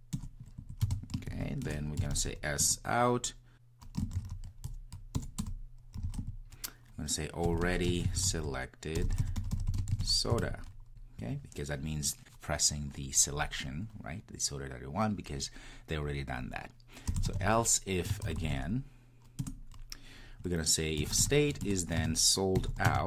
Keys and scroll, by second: 19.4 Return.